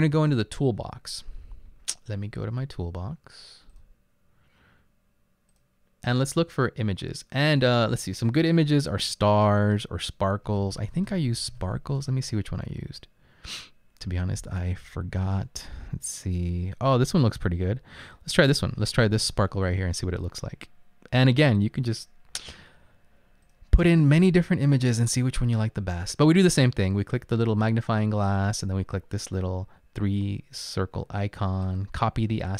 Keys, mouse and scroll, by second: 10.4-12.1 typing, 32.4 click.